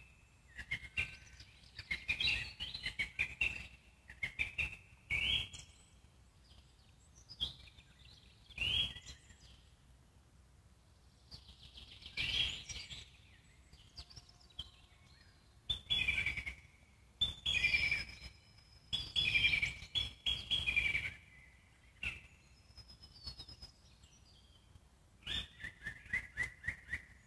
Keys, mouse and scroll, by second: 0.5 click, 2.4 alt+middle click, 3.0 click, 3.7 g, 5.2 alt+middle click, 5.8 click, 6.4 click, 7.1 g, 8.5 click, 10.3-13.1 alt+middle drag, 13.1 click, 14.5 alt+middle click, 15.3 g, 16.4-17.6 alt+middle drag, 17.6 click, 18.4 click, 19.8 g, 21.3 alt+middle click, 22.0 click, 23.8 click, 24.2 alt+middle click, 25.2 click.